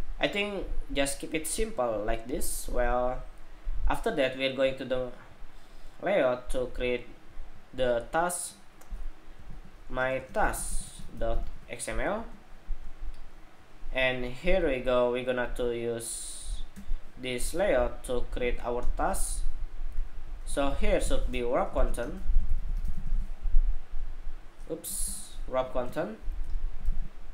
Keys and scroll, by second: 26.6 super+c.